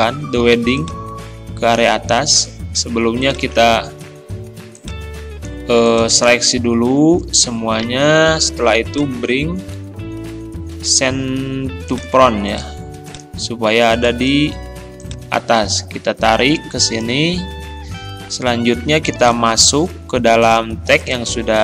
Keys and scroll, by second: 2.7 ctrl+z.